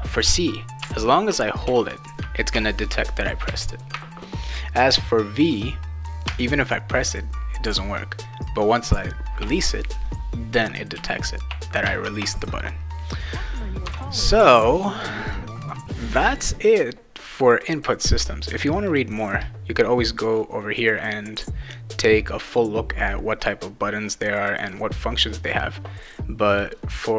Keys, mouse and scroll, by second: 0.8 c, 1.6 c, 2.5 c, 3.5 c, 6.3 v, 11.0 v, 11.9 v, 14.9 click, 17.2 click, 18.9 click, 20.1 click, 26.5 click.